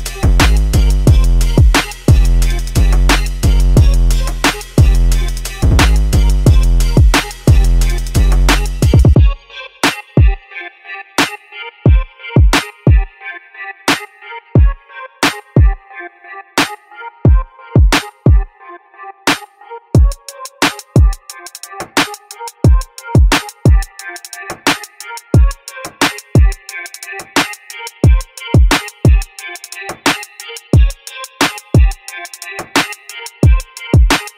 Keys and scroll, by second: 0.2-0.7 typing, 1.5 Return, 5.3 Escape.